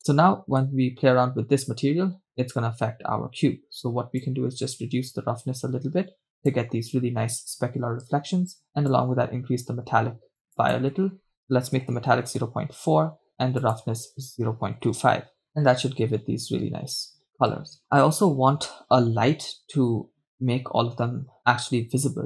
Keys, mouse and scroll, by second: 0.4 KP_0, 0.6-1.2 scroll down 1, 1.2 scroll down 4, 2.9 scroll down 1, 4.3-5.7 scroll down 1, 5.7-6.7 drag, 8.9-10.5 drag, 10.7-12.4 drag, 13.6-16.4 drag.